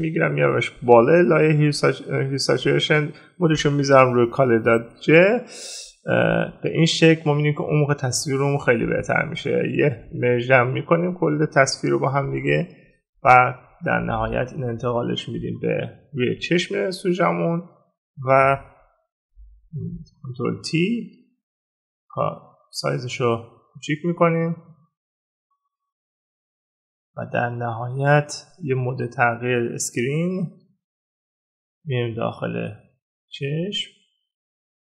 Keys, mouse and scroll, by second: 9.5 right click.